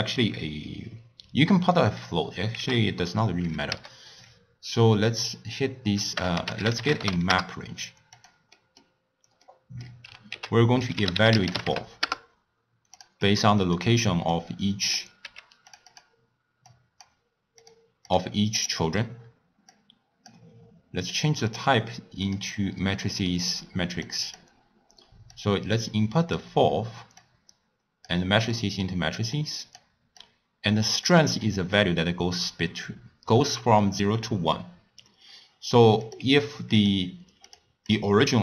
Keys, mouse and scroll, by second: 2.6 ctrl+a, 8.6 middle click, 9.0-9.4 scroll down 4, 9.4-10.3 middle drag, 10.3 ctrl+a, 13.6 click, 14.3 click, 15.2 g, 15.9 click, 16.7 click, 17.6 click, 18.1 click, 18.6 click, 19.7 drag, 21.2 click, 21.5-22.7 drag, 22.7 scroll up 2, 22.7 scroll down 4, 23.0 middle click, 23.4-24.1 scroll up 1, 24.1 click, 25.4-27.3 drag, 28.6-29.4 middle drag, 29.4 click, 30.2-31.4 drag, 31.4 scroll up 1, 31.6 scroll down 1, 31.7 scroll up 1, 32.0-35.1 scroll down 1, 36.0 click, 36.8 click, 37.4 click, 37.9 click.